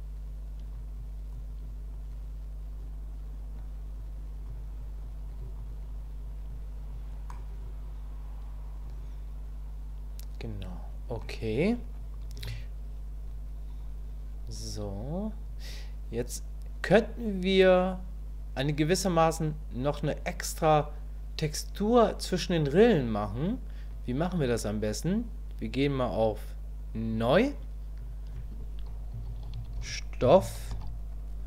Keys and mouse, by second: 1.0 click, 1.9-3.6 drag, 4.0 click, 4.8 click, 5.3 click, 5.9 click, 6.5 click, 7.3-10.2 drag, 10.2-11.2 middle drag, 12.4 KP_1, 13.8 click, 27.1 click, 28.0-31.4 drag.